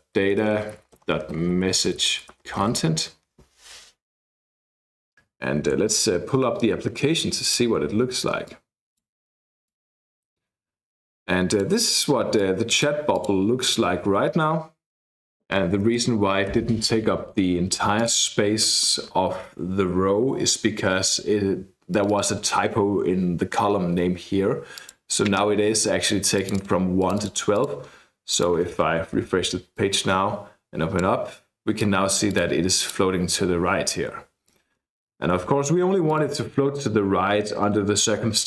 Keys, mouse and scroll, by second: 0.0-3.1 typing, 8.4 click, 9.7-11.6 drag, 12.3 click, 13.2 click, 14.9 click, 15.9 BackSpace, 16.5 n, 18.0-19.2 drag, 21.9 click, 24.7 click, 26.3-27.8 drag, 28.3 click, 29.2 ctrl+r, 29.8-31.1 drag, 31.8-33.2 drag, 34.5-36.0 drag.